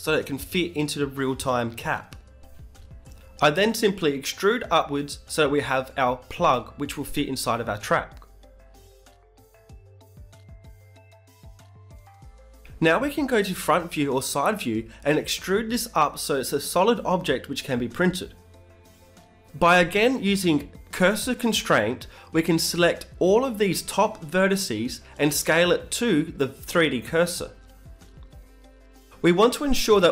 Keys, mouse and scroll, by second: 2.4 Tab, 2.9-4.7 middle drag, 4.8 Tab, 5.0 middle click, 5.6 right click, 6.5 middle click, 6.8 click, 6.9 Tab, 7.0 g, 7.2 e, 7.7 g, 10.0 Tab, 12.8-14.8 middle drag, 14.8 KP_1, 15.3 Tab, 15.7 middle click, 15.9 a, 16.2 a, 16.8 e, 17.5 g, 21.1 middle click, 21.8-25.0 right drag, 22.3 shift+s, 24.2 ctrl+z, 24.9 KP_1, 25.0 click, 25.0 z, 25.6 b, 26.6-27.7 middle drag, 27.0 z, 28.8 e, 29.2 s.